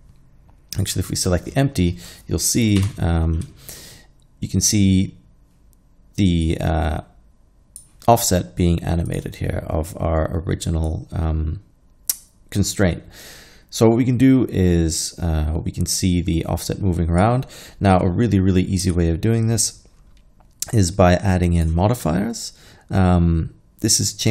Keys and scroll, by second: 2.9 Home, 18.9 n.